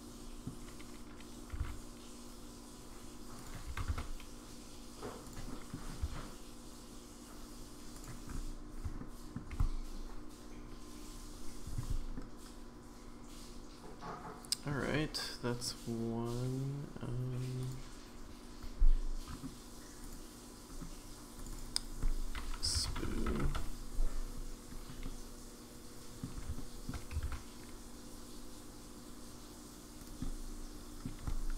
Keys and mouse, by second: 1.5 r, 3.7 g, 5.5 middle click, 6.0 s, 9.0-9.4 shift+middle drag, 12.1-14.7 middle drag, 17.6 click, 20.0 click, 21.5-24.0 drag, 25.0-26.2 middle drag, 26.5 shift+middle click, 27.3 shift+d, 30.2 middle click.